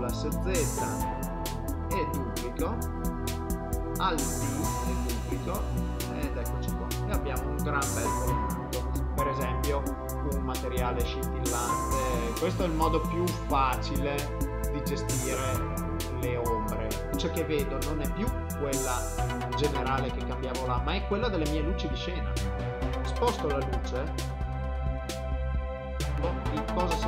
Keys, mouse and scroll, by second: 0.9 alt+d, 0.9 ctrl+middle click, 4.0 alt+d, 5.8 middle click, 5.8 x, 7.8 middle click, 10.8 middle click, 17.0 ctrl+middle click, 17.2 middle click, 19.8 middle click, 22.6 click, 22.6 middle click, 23.6 g, 26.4 ctrl+middle click.